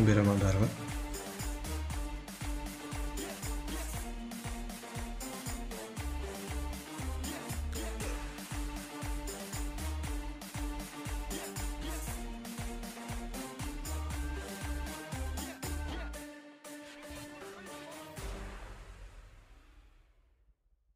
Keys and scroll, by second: 0.7 v, 1.5 v, 5.4 ctrl+z, 6.0 z, 14.1 ctrl+z, 14.3 ctrl+z, 14.5 ctrl+z, 15.8 ctrl+a, 15.9-18.9 typing, 17.0 ctrl+a, 17.2 Return, 20.1 ctrl+a, 20.3 0, 20.3 Return.